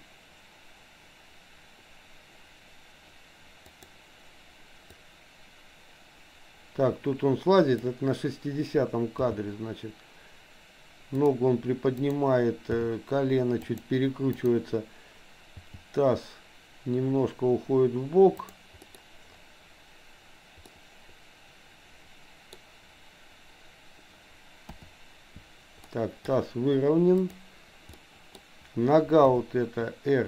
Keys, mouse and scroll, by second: 5.0-8.0 drag, 9.2 g, 12.0 click, 12.7 g, 14.2 click, 15.6 g, 18.9 middle click, 20.7-22.5 middle drag, 24.6 KP_7, 26.0 middle click, 27.2 click, 27.9 middle click, 29.2 KP_7.